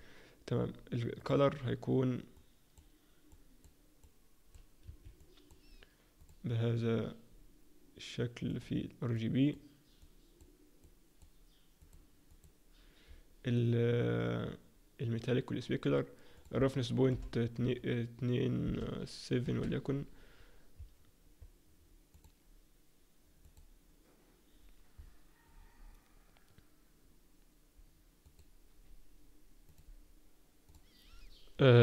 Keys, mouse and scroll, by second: 1.1 click, 1.1-1.5 scroll up 1, 18.3 click, 22.9 click.